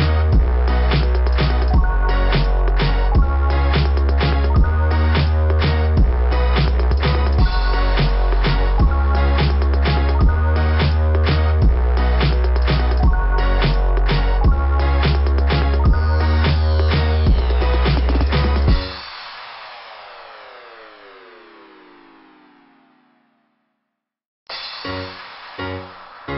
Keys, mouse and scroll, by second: 4.2 scroll down 2, 6.4-7.5 typing, 9.2 click, 9.5 click, 9.8 click, 17.5 click, 19.6 click, 21.8 click, 22.6 click, 22.9 click, 24.3 click.